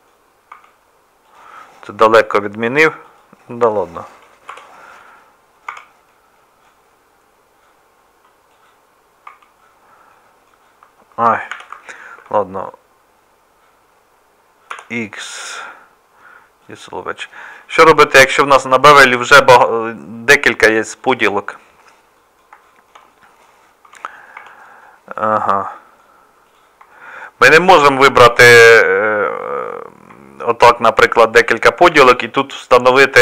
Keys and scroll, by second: 0.5 Tab, 4.5 Delete, 5.7 Tab, 9.2 Tab, 11.5 2, 18.2 ctrl+r, 23.8 Tab, 24.4 Tab.